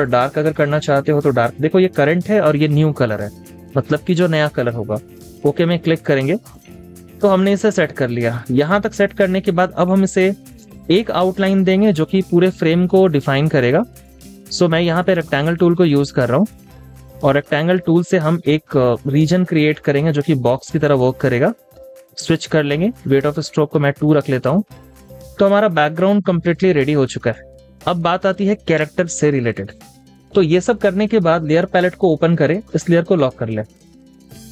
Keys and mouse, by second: 6.3 space, 6.8 double click, 7.0 space, 8.5 z, 10.9-11.9 typing, 11.6 double click, 26.4 space.